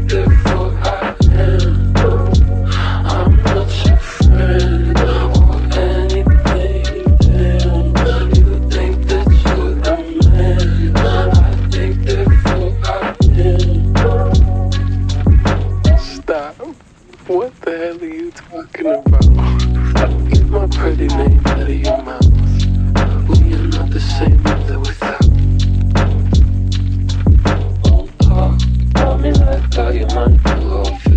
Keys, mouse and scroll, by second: 0.2-1.4 typing, 4.2-5.0 typing, 6.9 u, 11.6 ctrl+alt+shift+y, 12.5 alt+[, 14.2 ctrl+shift+d, 14.9 Delete, 20.9 ctrl+y.